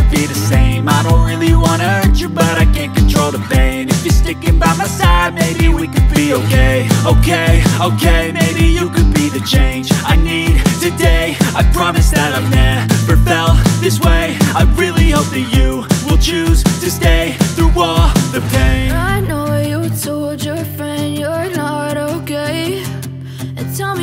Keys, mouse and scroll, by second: 0.0 click, 4.5 click, 10.7 click, 11.6 alt+scroll up 1, 12.1 space, 12.1 click, 12.4 space, 13.9 click, 20.1 click.